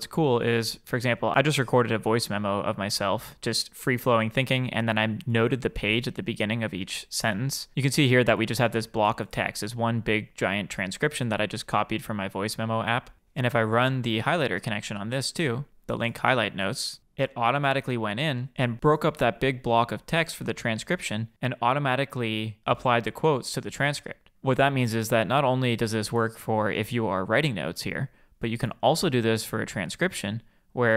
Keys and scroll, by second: 14.6 super+p.